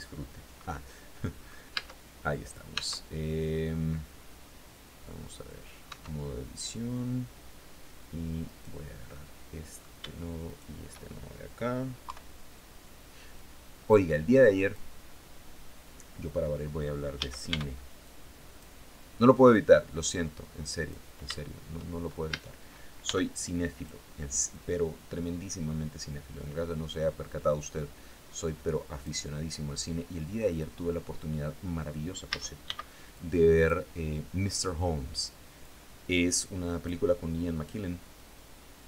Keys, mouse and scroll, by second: 1.2 Tab, 2.2 Tab, 5.4 Tab, 7.9 right click, 8.6 click, 9.9 shift+right click, 11.5 KP_3, 12.8-14.4 drag, 16.6 a, 16.9 b, 17.5 click, 18.9-20.5 drag, 21.7 a, 22.5 b, 22.8 click, 23.9-28.7 drag, 29.2 click, 31.7 a, 32.1 b, 32.6 click, 35.0-36.5 drag, 37.6-38.8 drag.